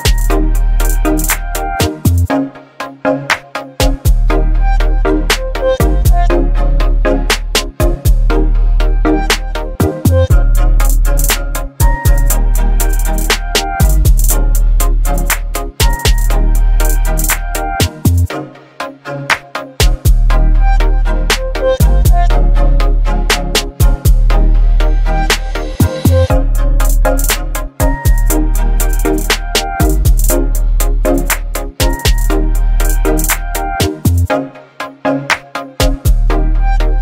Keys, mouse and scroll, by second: 0.0 ctrl+0, 1.5 v, 4.7 click, 7.7 ctrl+g, 9.0 ctrl+t, 10.9-16.2 drag, 18.6 click, 20.5 t, 24.6 t, 24.6-28.4 drag, 34.0 ctrl+c, 35.6 click.